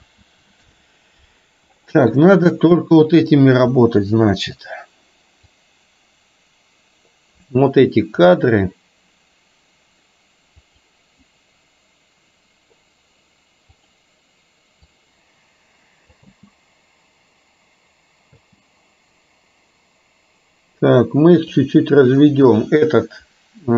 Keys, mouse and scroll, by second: 0.4 ctrl+z, 4.0 middle click, 5.6-8.3 drag, 10.8 click, 13.9 click, 15.0-16.3 drag, 16.4 space, 18.4 space, 21.5 click.